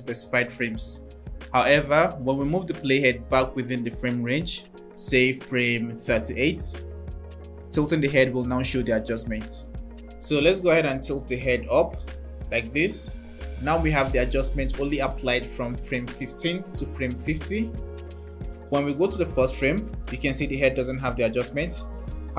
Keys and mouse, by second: 0.8-2.0 drag, 3.2 click, 7.3-7.7 drag, 14.3 click, 18.8 click.